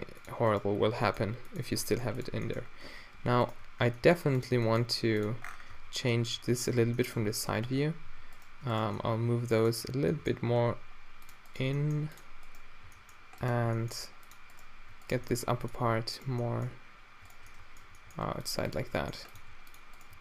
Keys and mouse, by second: 1.0 g, 1.9 g, 3.1 z, 3.9 g, 4.6 g, 5.9 Tab, 6.4 z, 6.8 Tab, 7.2 Tab, 7.7 Tab, 8.1 a, 8.3-10.1 drag, 10.1 g, 11.8 g, 12.9 g, 13.8 g, 15.3 g, 16.5-20.2 drag, 18.1 g, 18.8 g, 19.4 g.